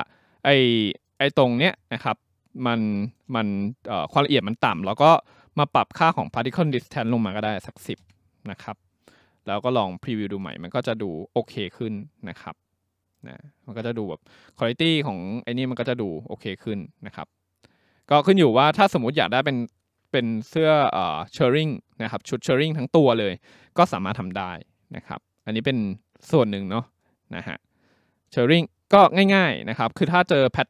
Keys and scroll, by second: 7.3-8.3 typing.